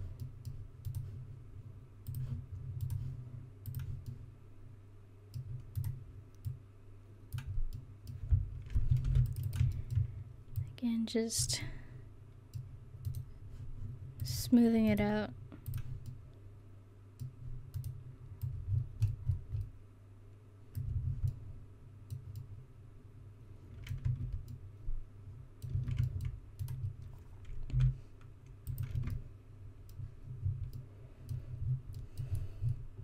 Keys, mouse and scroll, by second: 0.4-1.8 middle drag, 4.2-5.4 middle drag, 5.8-7.0 right drag, 6.5 middle click, 7.8 middle click, 9.1 ctrl+r, 14.3 click, 14.3 right click, 16.2 middle click, 17.8 right click, 18.5 click, 21.2 middle click, 24.1 Tab, 25.8 Tab, 26.7 right click, 26.8 middle click, 27.8 g, 29.0 Tab.